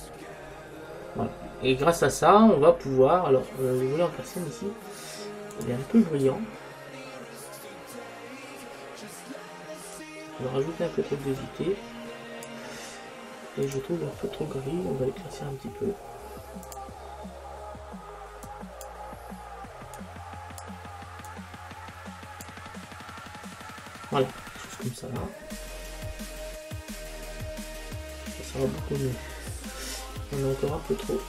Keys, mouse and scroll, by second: 1.6-3.7 middle drag, 5.7 click, 10.2-11.9 drag, 13.8-15.6 drag, 16.9-18.6 drag, 24.5-28.1 middle drag, 28.8-30.8 middle drag.